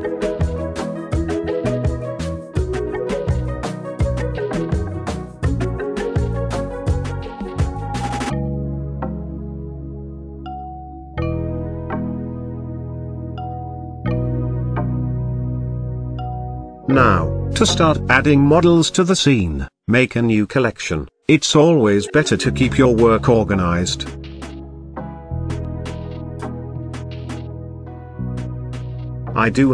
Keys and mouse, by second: 0.0-2.6 middle drag, 3.9-5.6 middle drag, 6.4 click, 8.2-8.7 middle drag, 9.6-13.0 drag, 13.7-14.6 shift+middle drag, 15.4 click, 18.5 right click, 21.3 click, 21.5-23.6 drag, 23.9-27.4 drag.